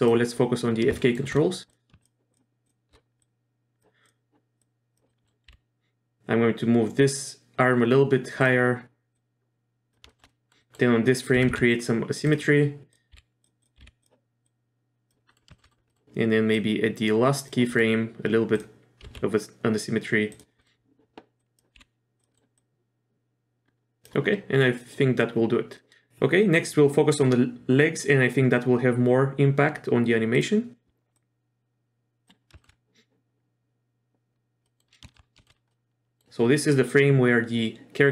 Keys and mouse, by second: 1.0 shift+middle click, 1.7 click, 2.0 shift+click, 3.2 click, 4.0 click, 4.6 click, 5.1 middle click, 5.5 r, 9.2-9.9 drag, 10.1 shift+middle click, 10.3 middle drag, 10.6 middle click, 11.3 r, 13.1 r, 13.6 click, 13.8 r, 14.5-15.1 drag, 15.3 middle click, 15.5 shift+middle click, 15.6 middle click, 15.9 middle click, 16.6-17.5 drag, 17.7 middle click, 19.1 r, 20.6 middle click, 21.4 click, 21.8 r, 22.3 middle click, 22.6-24.1 drag, 30.3 drag, 31.2-32.3 drag, 32.6 shift+middle click, 34.7 middle click, 35.1 shift+middle click, 35.4 shift+middle click, 35.7-36.2 middle drag.